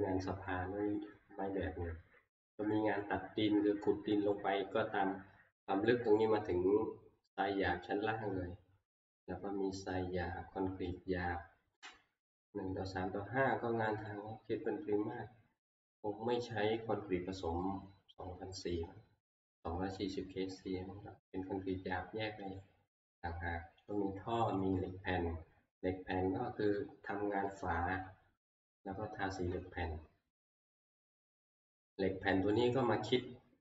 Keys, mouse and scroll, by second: 5.3 scroll, 22.6 click, 23.9 click, 24.7 click, 26.7-27.5 scroll, 28.9-30.7 scroll, 31.2 shift+middle click, 31.7-32.3 scroll, 33.1 middle click.